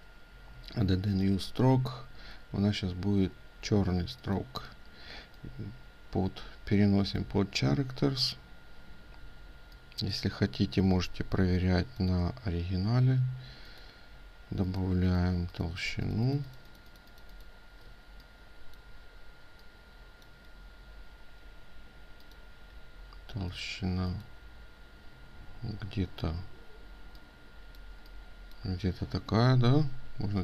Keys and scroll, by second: 17.4 ctrl+space.